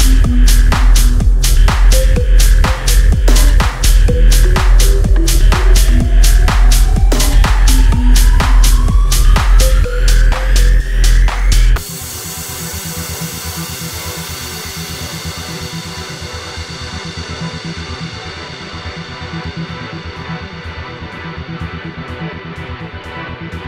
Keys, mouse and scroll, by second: 4.2 click, 5.6 click, 9.6 click, 11.9 3, 14.5 Tab, 15.6 z, 16.5 click, 18.2 Escape, 19.2 z, 19.5-20.6 middle drag, 20.8 click, 21.4 click, 22.1 Tab, 22.4 click, 22.7 click, 23.4 3.